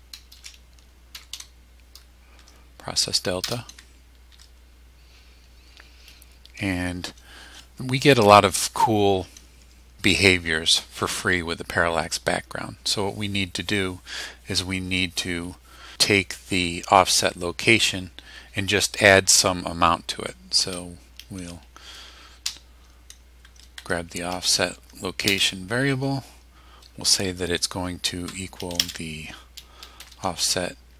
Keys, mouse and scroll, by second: 0.3-1.8 typing, 2.4 Tab, 3.4 Return, 4.3 Tab, 22.4 o, 23.8 Tab, 25.3 space, 28.2-30.6 typing.